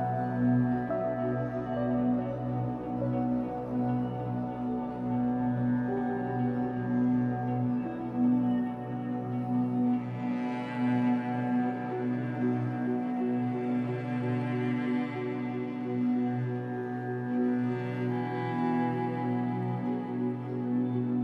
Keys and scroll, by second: 0.2 w, 6.6 Escape, 6.8 3, 8.4 b, 17.7 b, 20.2 Escape, 20.5 3.